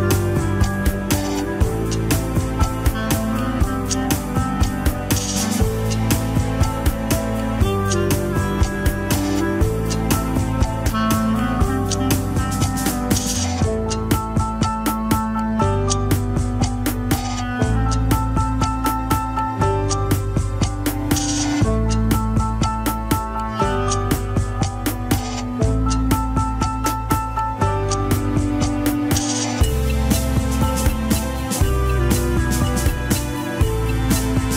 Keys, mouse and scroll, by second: 0.6-2.2 drag, 2.8-3.6 scroll down 1, 3.7 click, 5.3 alt+r, 5.8 r, 8.3 click, 9.2 r, 13.3-14.3 middle drag, 14.3 scroll down 1, 14.4 KP_1, 15.0 r, 17.0 alt+z, 17.2 scroll down 2, 18.3 r, 19.7 r, 23.4 ctrl+s, 24.1 r, 25.4-26.8 middle drag, 26.8-28.0 scroll down 2, 26.9 KP_1, 28.0-28.9 shift+middle drag, 28.9 scroll up 1, 29.6 a, 30.0 alt+r, 30.4 alt+g, 30.8 ctrl+Tab, 31.0 scroll down 1, 31.7 ctrl+s, 32.0-33.9 shift+middle drag, 33.9 ctrl+Tab, 34.3 click.